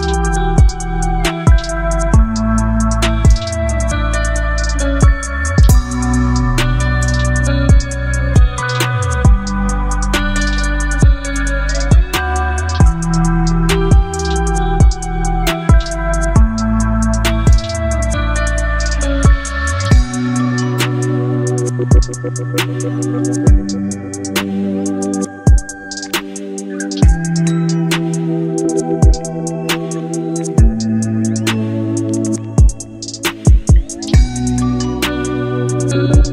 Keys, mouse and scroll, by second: 2.7 alt+scroll up 1, 3.6 space, 3.7 click, 3.8 click, 4.1 space, 5.3 Left, 9.2 ctrl+t, 11.3-12.2 shift+click, 14.2 space, 14.5 click, 14.7-15.4 space, 17.1-20.9 alt+drag, 22.2 ctrl+t, 24.0-25.5 shift+drag, 25.8 space, 25.9-26.8 click, 26.3 space, 27.1 alt+scroll down 1, 28.2 alt+scroll down 1, 28.7 space, 28.8-29.4 click, 29.2 space, 30.2 click, 33.2 ctrl+0.